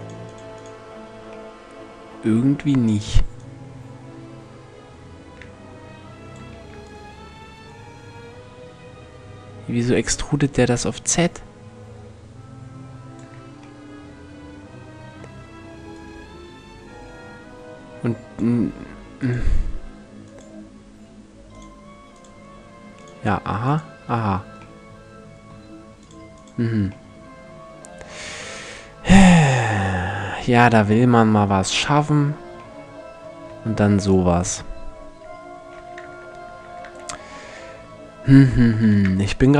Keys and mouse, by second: 3.0-4.8 drag, 15.6-17.5 middle drag, 18.8-20.6 drag, 20.6 middle click, 21.2-24.4 drag, 24.4-26.6 middle drag, 33.1 x, 35.6 Tab, 36.2 Tab, 38.5 shift+c.